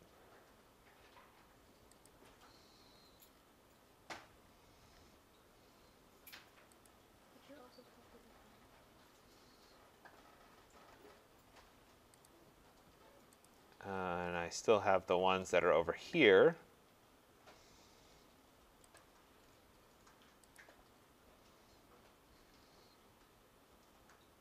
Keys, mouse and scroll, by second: 2.1 click, 2.4 middle click, 2.5 middle click, 2.6 middle click, 2.6 middle click, 2.9 middle click, 3.0 middle click, 3.3 middle click, 3.4 middle click, 4.3 middle click, 4.5 middle click, 4.5 middle click, 4.8 middle click, 4.9 middle click, 6.9 click, 7.2-8.7 scroll, 9.4-10.3 scroll, 10.7 scroll, 12.2 click, 13.5 click, 13.9-15.5 scroll, 16.6 middle click, 16.7 middle click, 16.8 middle click, 19.0 click, 20.6 click.